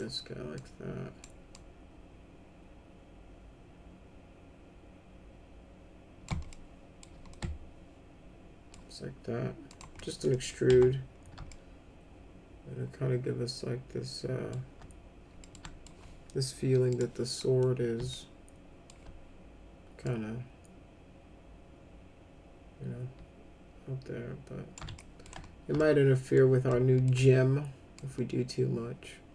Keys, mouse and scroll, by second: 0.5 click, 1.5-6.2 drag, 6.4 alt+middle click, 7.3-8.7 alt+middle drag, 9.6 click, 9.9 middle click, 10.3 middle click, 10.7 F3, 11.5-14.5 alt+middle drag, 15.4 middle click, 15.6 alt+middle click, 16.8 click, 17.4 middle click, 18.1 alt+middle click, 20.0-24.7 drag, 24.9 alt+middle click, 25.7 alt+middle click, 26.6 alt+middle click, 27.9-29.3 drag.